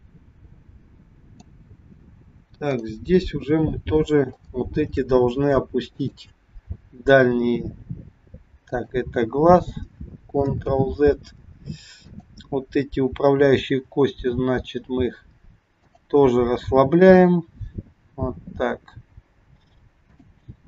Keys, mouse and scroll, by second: 2.7 click, 3.8 scroll up 1, 4.4 shift+middle click, 4.4 shift+scroll up 1, 5.8 click, 7.5 g, 10.8 ctrl+z, 11.9 click, 13.5 g, 16.9 click, 18.1 g.